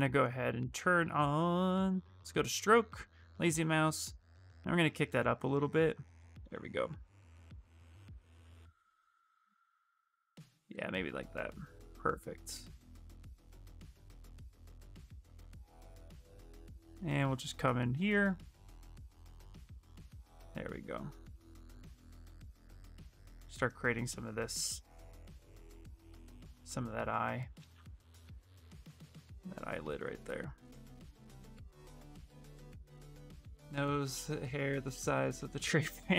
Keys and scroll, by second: 6.2 ctrl+z, 22.4 s, 25.0 ctrl+z.